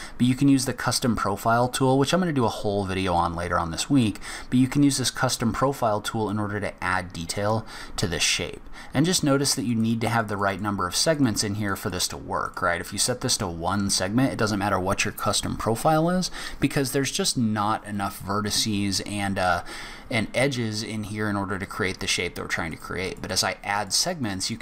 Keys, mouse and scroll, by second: 2.1 scroll up 1, 2.6 scroll down 1, 3.1 middle click, 5.3 click, 7.5 click, 9.6 click, 9.9 click, 10.0 click, 10.3 click, 10.5 click, 10.8 click, 11.1 click, 11.7 click, 11.9 click, 12.4 click, 22.7 click, 23.0 click, 23.3 click, 23.7 click, 24.0 click, 24.2 click, 24.4 click.